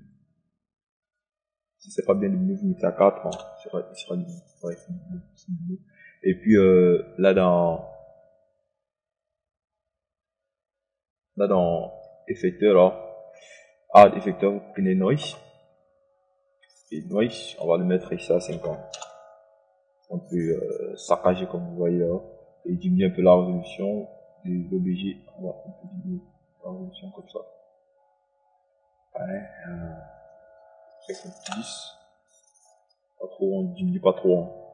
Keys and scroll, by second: 4.8 KP_4, 5.3 Return, 20.4 KP_0, 32.9 KP_0, 33.4 Return.